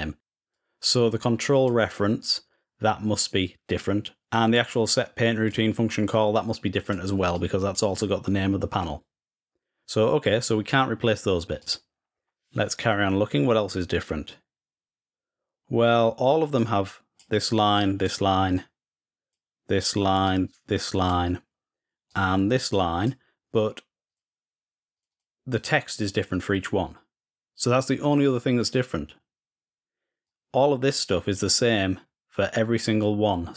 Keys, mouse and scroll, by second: 0.0-1.5 drag, 4.0 drag, 4.4 click, 6.6 click, 7.1 click, 11.4 click, 12.0-12.4 scroll down 1, 14.1-15.0 scroll down 1, 16.3-19.1 drag, 20.0 click, 21.8-22.8 drag, 23.8 click, 24.7 click, 24.8 click, 25.3 click, 30.0-31.8 drag.